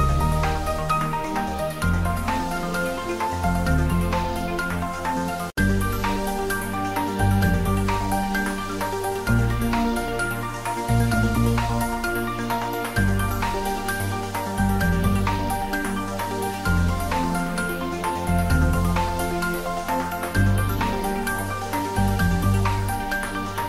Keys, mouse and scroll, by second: 14.7 ctrl+Num_Lock, 15.1 ctrl+s, 17.8 click, 18.7-19.6 typing, 19.7 shift+middle click, 20.4 ctrl+middle click, 21.0-23.1 shift+middle drag.